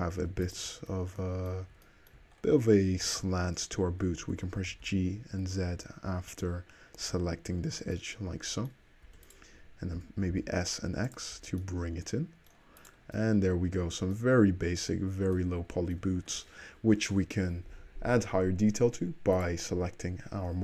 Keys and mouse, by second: 0.2 2, 0.5 click, 4.4 g, 9.1 3, 9.3 click, 9.4-12.9 middle drag, 10.0 s, 11.4 Tab, 12.9 click, 13.3-17.6 middle drag, 14.5 `, 19.4 click.